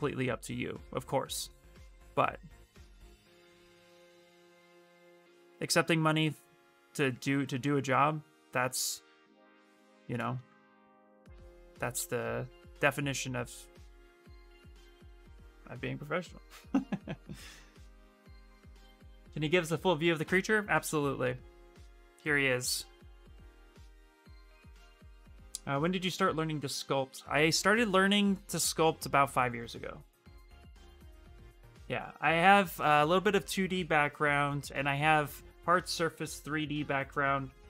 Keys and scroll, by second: 6.0 ctrl+space, 13.8 ctrl+z, 13.9 ctrl+z, 20.0 f.